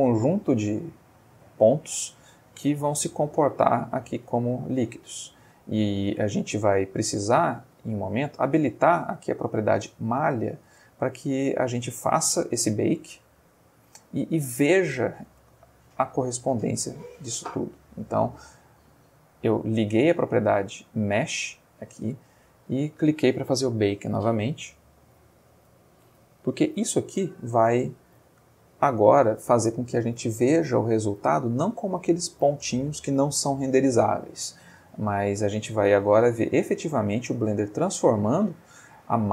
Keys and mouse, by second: 1.1-1.7 middle drag, 3.9-4.6 middle drag, 5.2-5.8 middle drag, 6.6 Escape, 8.1 click, 9.9-10.4 middle drag, 10.6 space, 15.3 space, 16.4 click, 18.6 click.